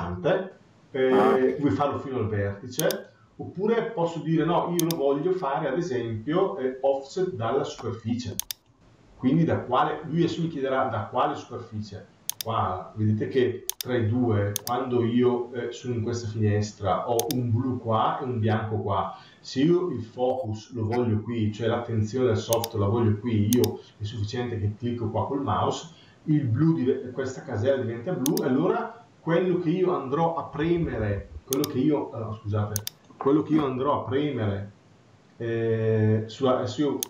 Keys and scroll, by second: 30.5 Escape.